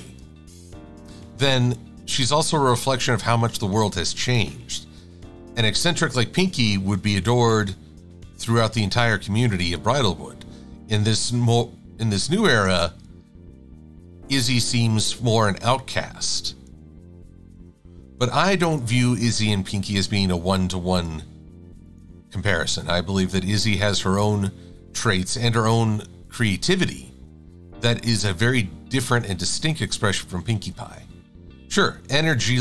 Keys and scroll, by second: 1.0 Delete, 22.8 Delete.